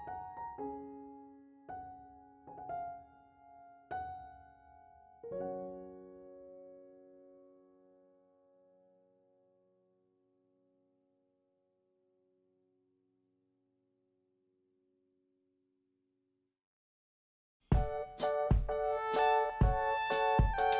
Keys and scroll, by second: 4.2-5.0 typing, 6.6 4, 6.7 Return, 8.3 BackSpace, 8.5 5, 8.6 Return, 9.9 3, 10.1 Return, 12.2 2, 12.4 Return, 19.2 1, 19.4 Return, 20.6 3.